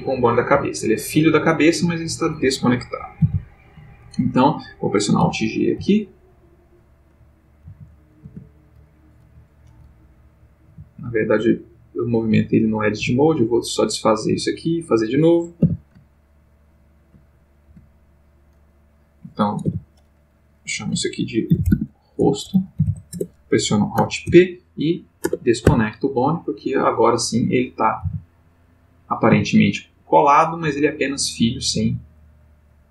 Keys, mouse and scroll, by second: 0.1 click, 0.6 g, 1.4 click, 3.2 alt+r, 4.0 alt+click, 5.2 alt+g, 7.6 alt+g, 8.3 alt+Tab, 10.6 g, 12.3 click, 13.1 x, 13.4 click, 14.4 click, 15.6 e, 17.7 z, 18.2 click, 18.7 click, 19.6 F2, 21.5-22.9 typing, 23.1 shift+Return, 24.2 alt+p, 25.2 Return, 25.7 Tab, 27.6 click, 28.0 r, 28.6 click, 29.1 click, 29.3 g, 29.9 click, 30.4 click, 30.6 g, 31.8 click.